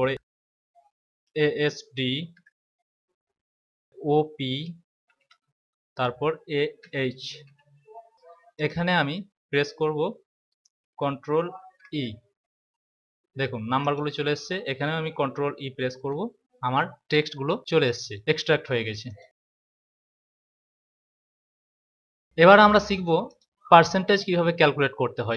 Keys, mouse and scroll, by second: 0.1 a, 1.6-2.2 typing, 4.9 typing, 6.7-7.4 typing, 8.1 click, 11.5 ctrl+e, 13.7 click, 15.8 ctrl+e, 17.7 click, 19.0 click, 23.2 click.